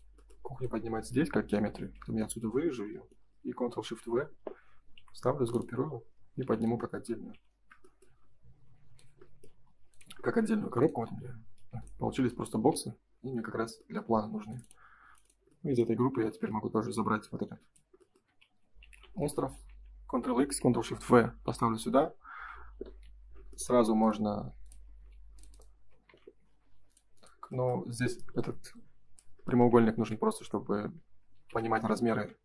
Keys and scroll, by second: 1.7 ctrl+x, 2.6 Escape, 3.8 ctrl+shift+v, 4.9 g, 7.3 shift+f, 9.4 space, 9.6 Escape, 11.5 space, 13.5 Escape, 14.2 space, 16.2 shift+f, 18.4 ctrl+c, 19.3 Escape, 21.4 g, 22.2 ctrl+s, 26.0 Escape, 29.9 ctrl+x, 30.3 Escape, 31.3 ctrl+shift+v, 32.0 ctrl+s.